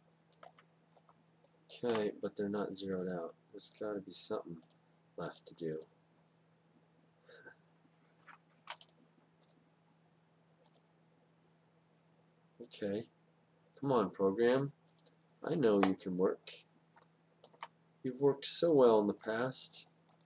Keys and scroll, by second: 9.2 F8.